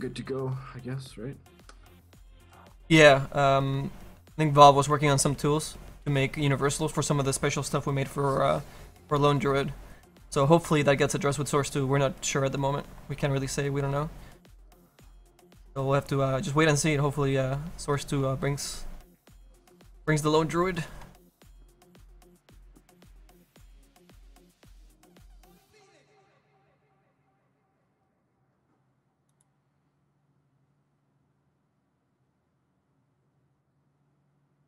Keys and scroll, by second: 27.7 s.